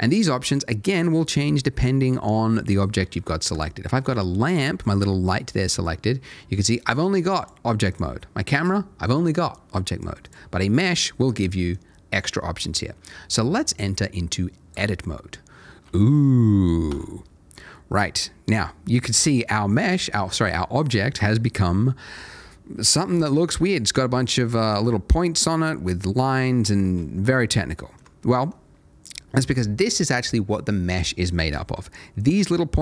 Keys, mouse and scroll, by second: 1.4 scroll down 1, 2.0-3.5 scroll down 1, 3.5 click, 6.8 click, 10.5 scroll up 1, 11.7 click, 15.4-15.8 scroll up 1, 16.0 middle click, 16.9 a, 17.3 middle click, 20.7 shift+middle click, 21.3-21.8 scroll up 1, 23.2-26.2 scroll down 1, 26.4 middle click, 27.3 ctrl+middle click, 28.2 ctrl+middle click, 32.2 click.